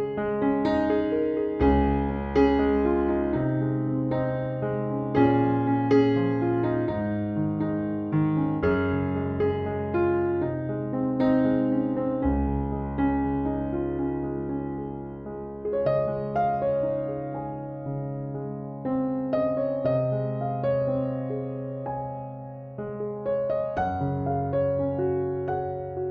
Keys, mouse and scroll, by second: 9.7 3, 10.6 Return, 17.6 4, 17.8 5, 18.2 Return, 23.5 3, 23.8 6, 24.0 Return, 25.4 Escape.